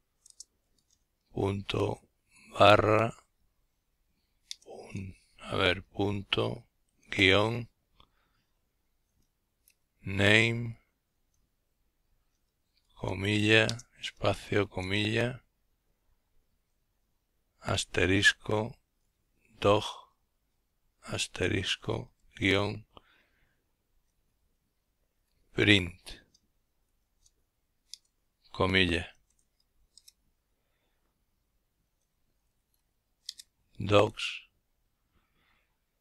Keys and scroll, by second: 0.0-0.1 typing, 1.9 typing, 3.4 typing, 4.6 typing, 5.9 typing, 7.7-9.0 typing, 11.5 typing, 13.2-14.0 typing, 16.8 typing, 17.9-18.7 typing, 19.9 typing, 21.4 typing, 22.5-24.5 typing, 25.6 typing, 26.8 typing, 28.0-28.8 typing, 30.4-32.1 typing.